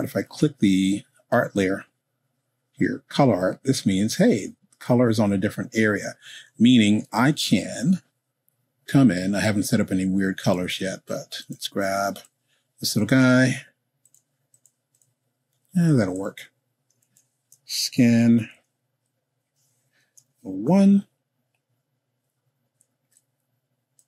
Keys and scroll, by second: 17.0 s, 17.6 k, 17.8 i, 18.6 n, 20.2 0, 20.6 1.